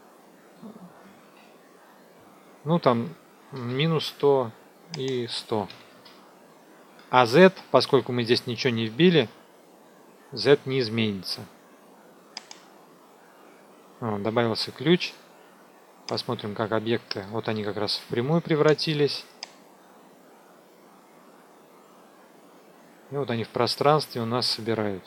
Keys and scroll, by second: 1.0 BackSpace, 3.4 KP_Subtract, 3.6 KP_1, 3.8 KP_0, 5.6 KP_1, 5.7 KP_0.